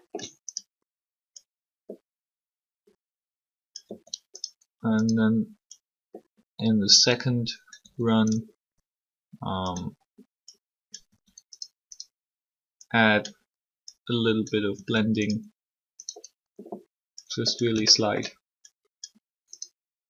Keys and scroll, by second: 3.8 r, 7.8 r, 11.1 r, 14.7 r.